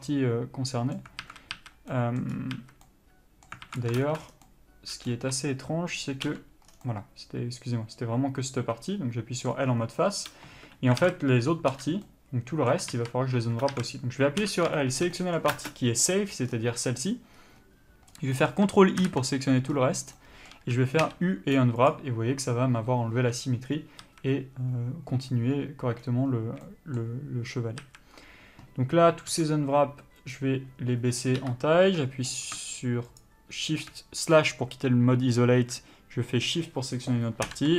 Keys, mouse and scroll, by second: 1.4 alt+a, 2.1 middle click, 2.5 scroll up 1, 2.8 a, 3.1 middle click, 3.9 alt+a, 4.3 ctrl+space, 4.3-4.6 middle drag, 4.4 scroll down 2, 5.4 3, 6.5-15.8 middle drag, 6.5 l, 6.9 scroll down 2, 9.8 scroll up 1, 10.7 space, 12.0 l, 13.9 alt+a, 14.6 l, 18.6 middle click, 19.2 ctrl+i, 19.9 scroll up 1, 20.4 middle click, 26.9 middle click, 28.0 a, 29.5 s.